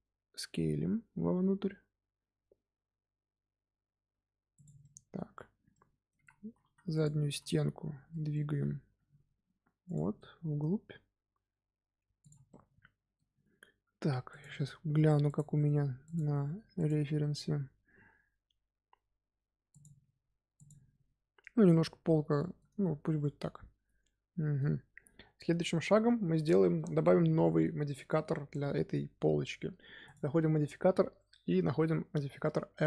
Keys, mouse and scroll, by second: 0.2 s, 4.7-6.1 middle drag, 6.1 z, 6.9 click, 7.5-8.9 middle drag, 8.9 g, 12.1 click, 12.4-15.6 middle drag, 21.6-22.6 middle drag, 22.6 Tab, 23.1-24.7 middle drag, 24.7-25.4 scroll down 1, 25.4 KP_1, 26.7-28.7 middle drag, 28.7-29.5 scroll up 2, 29.5-30.0 scroll up 1, 30.0-32.8 drag.